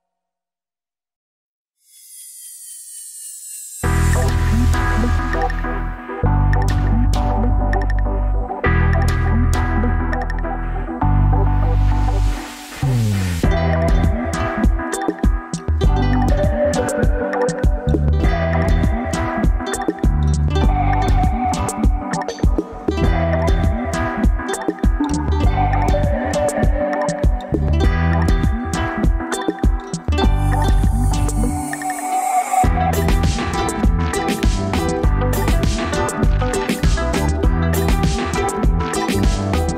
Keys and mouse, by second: 2.6 click, 3.3-9.9 middle drag, 10.2 Tab, 10.9 Tab, 11.7-14.2 middle drag, 14.9 middle click, 18.2 Tab, 19.0-20.2 middle drag, 32.8 ctrl+z, 33.1 ctrl+z, 36.3 ctrl+z, 39.4 ctrl+KP_Add.